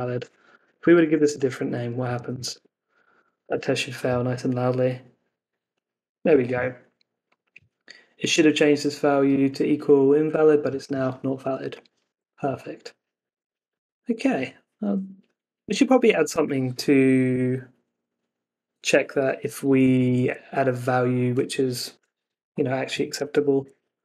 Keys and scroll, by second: 2.0 Escape, 2.2 super+s, 2.5 super+Tab, 2.8 Up, 3.4 Return, 12.0 super+Tab, 13.3 super+s, 19.6 Up.